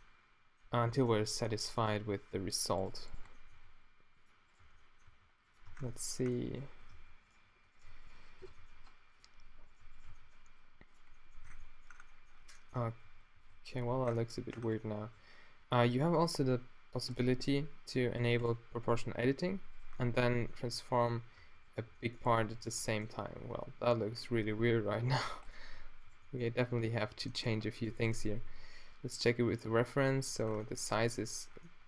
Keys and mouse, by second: 2.2 Tab, 3.3 middle click, 3.5 g, 4.6 q, 5.1 g, 5.7 Tab, 6.9 Tab, 7.9 shift+right click, 8.6 g, 10.2 g, 11.4 Tab, 12.8 Tab, 13.0 a, 13.4 b, 13.9 q, 14.6 Tab, 15.9 Tab, 20.0-20.8 middle drag, 20.3 Tab, 21.5 Tab, 21.9 g, 22.7 g, 27.8 g, 28.0 Tab, 28.2 z, 29.8 z, 30.4 Tab, 30.9 Tab.